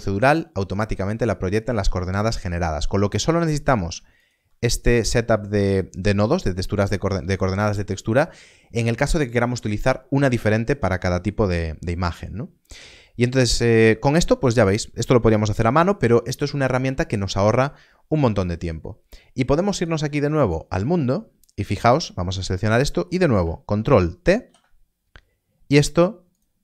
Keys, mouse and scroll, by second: 3.4 middle click, 4.1 shift+click, 4.5 scroll up 1, 5.0 middle click, 19.6 click, 21.9 scroll up 1, 22.5 middle click, 24.4 ctrl+t, 26.2 click.